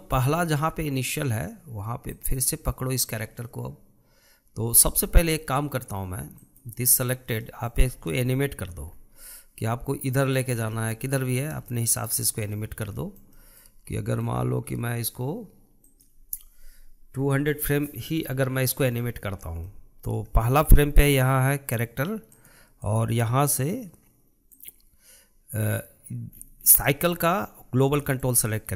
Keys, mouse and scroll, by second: 0.5 scroll up 1, 0.8-2.5 shift+middle drag, 2.5 click, 5.1-6.8 scroll down 1, 6.8 click, 7.3-7.9 scroll down 1, 7.9-9.3 shift+middle drag, 9.3-9.7 scroll down 2, 9.7-10.9 middle drag, 10.9 scroll down 2, 11.1-12.8 shift+middle drag, 12.8-13.4 scroll down 1, 13.4-16.3 shift+middle drag, 16.3-19.5 drag, 23.3-26.7 drag, 26.7 scroll up 1, 27.2-28.4 shift+middle drag.